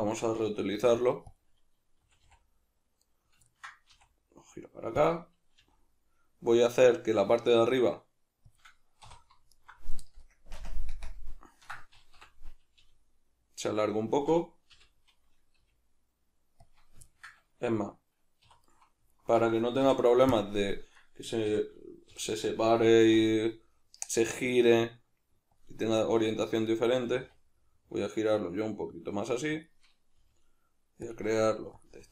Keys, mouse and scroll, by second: 0.0-0.8 shift+middle drag, 0.8 shift+d, 1.4 click, 2.0 r, 3.2 right click, 3.5 ctrl+middle click, 3.9 r, 5.1 click, 5.6 g, 8.6 click, 9.1 3, 9.6 alt+right click, 10.4 ctrl+KP_Add, 11.0 ctrl+KP_Subtract, 12.2 o, 14.2 click, 14.7 l, 15.5 g, 16.7 click, 17.1-18.6 ctrl+middle drag, 18.4 3, 18.6 right click, 19.1 alt+right click, 19.8 x, 20.9 right click, 21.5 l, 22.1 o, 23.0 r, 25.6 click, 27.0 r, 29.6 click, 30.2 g, 31.2 click, 31.3 r, 31.8 click, 31.9 g.